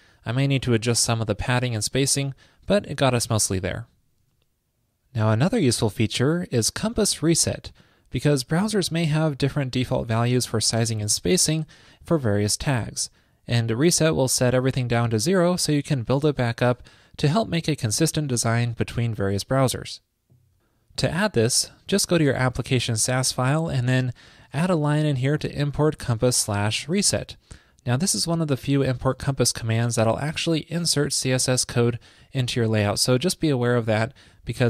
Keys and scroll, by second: 24.5 ctrl+shift+d, 29.2 super+s.